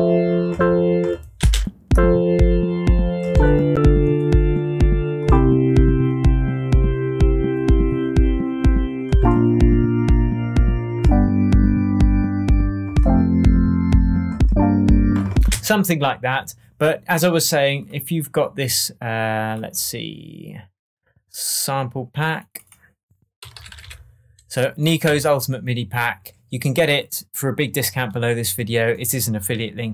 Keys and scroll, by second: 1.3 space, 15.4 space, 23.1-24.2 typing, 25.0 Right.